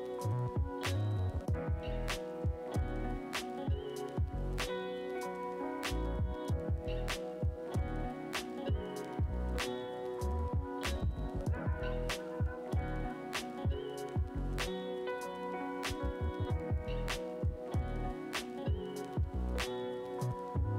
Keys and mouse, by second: 0.1-20.7 drag, 5.0 ctrl+z, 19.6-19.9 [, 20.1 [, 20.2 [.